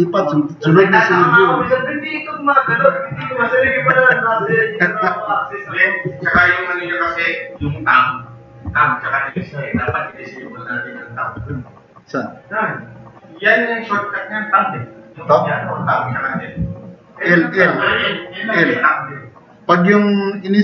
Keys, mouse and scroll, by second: 9.7 Tab, 11.4 e, 12.0 click.